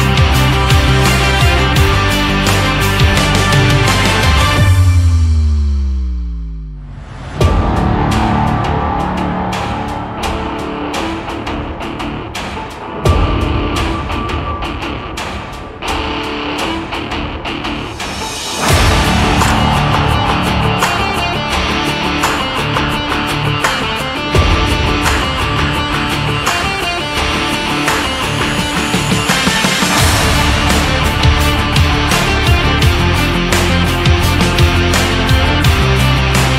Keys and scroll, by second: 3.6 Right, 6.0 Up, 6.8 Right, 7.9 Up, 10.1 Right, 10.7 Down, 13.1 Down.